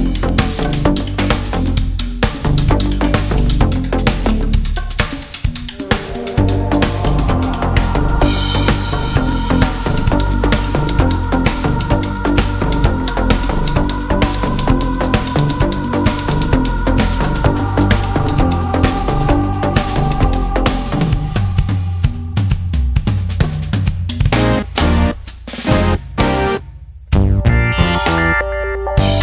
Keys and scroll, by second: 3.8 ctrl+c, 6.8 ctrl+v.